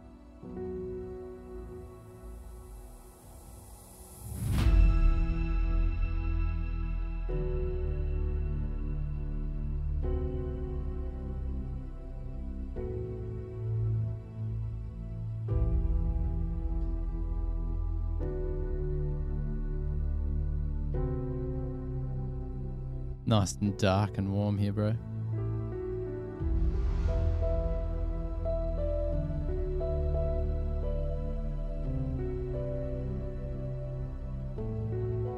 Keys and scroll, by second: 0.4 super+-, 30.8-31.5 typing.